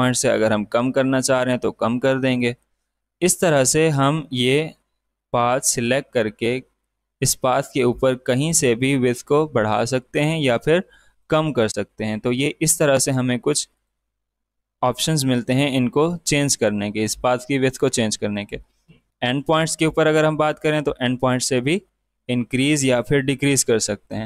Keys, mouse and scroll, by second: 5.1-19.0 drag, 20.2-24.2 drag.